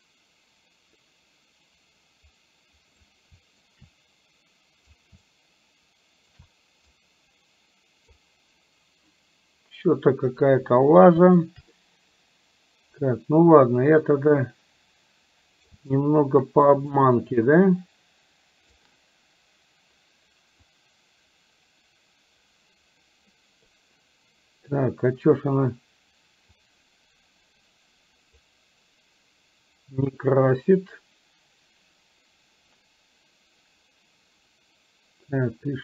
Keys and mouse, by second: 3.7-4.9 shift+right drag, 5.3-6.3 shift+right drag, 6.9-8.2 right drag, 11.7-15.7 right drag, 16.1-18.8 shift+right drag, 20.9-23.7 drag, 26.8-28.4 drag.